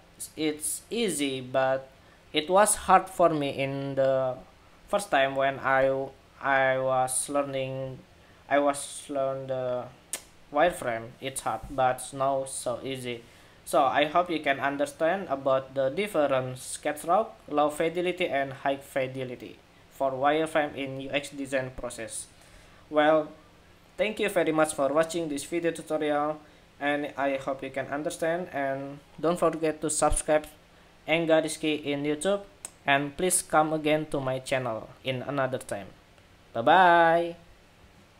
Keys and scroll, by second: 37.9 shift+super+2.